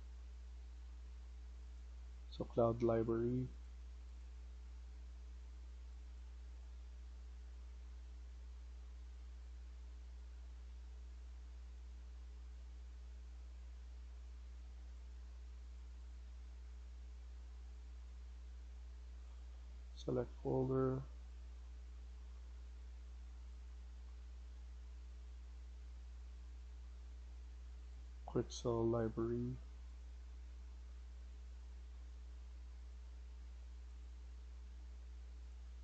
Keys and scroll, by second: 0.8 Escape.